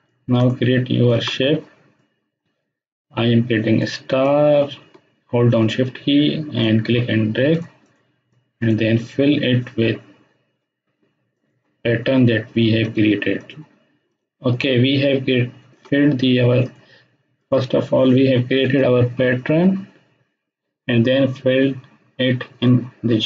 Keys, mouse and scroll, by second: 0.4-1.1 drag, 14.3 space, 14.6-15.8 ctrl+drag, 23.1 click.